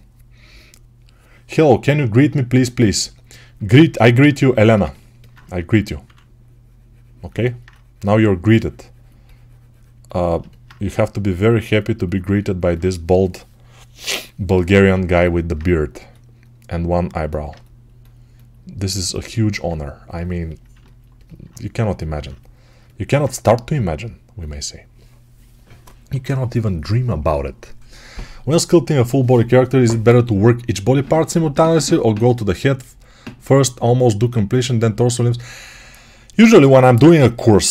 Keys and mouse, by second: 3.5-8.9 ctrl+alt+drag, 5.4 2, 5.9 3, 10.7 g, 17.0-20.6 alt+right drag, 21.0 right click, 21.3 right click, 21.7-30.8 alt+drag, 30.8-37.7 alt+right drag, 36.8 alt+q.